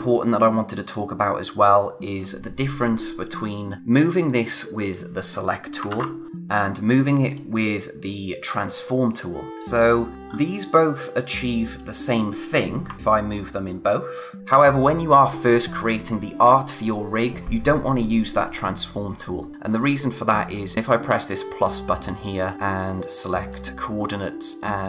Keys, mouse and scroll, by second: 0.8 click, 3.0 click, 5.9 ctrl+z, 6.3 click, 7.3 click, 9.5 click, 9.7-10.1 scroll down 1, 10.1 click, 10.3-11.3 scroll up 1, 11.3 click, 13.0 click, 20.7 click, 21.2 click, 23.4 click.